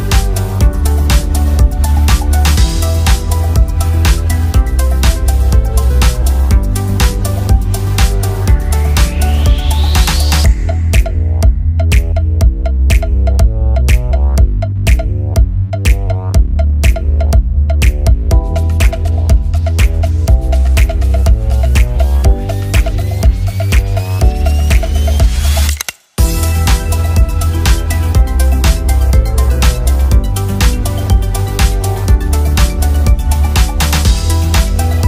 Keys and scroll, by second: 3.2 ctrl+z.